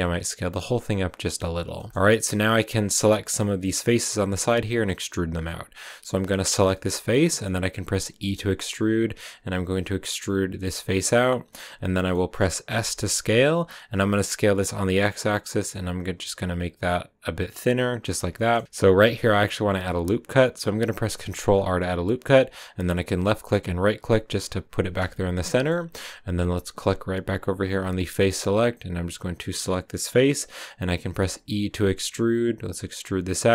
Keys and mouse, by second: 1.2 click, 1.7 middle click, 6.0 click, 6.3 middle click, 6.8 middle click, 7.1 middle click, 8.4 e, 10.8 click, 11.0 middle click, 11.8 middle click, 12.7 s, 13.1 x, 17.8 click, 18.3 shift+middle click, 18.6-20.7 middle drag, 21.2 ctrl+r, 23.6 click, 25.4 click, 27.6 drag, 29.1 click, 30.0 middle click, 32.1 e, 32.8 click.